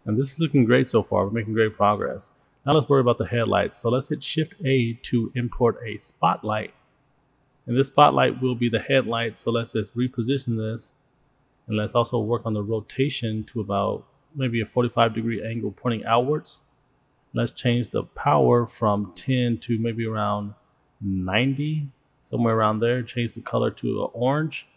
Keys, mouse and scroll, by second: 5.7 shift+a, 9.3-10.6 drag, 11.0-11.4 scroll down 3, 12.2-12.5 scroll up 1, 14.0-15.1 drag, 15.5 click, 16.1-17.3 drag, 17.6 click, 18.0-18.9 drag, 19.2 click, 21.3-22.4 drag, 22.4 click, 24.4 click.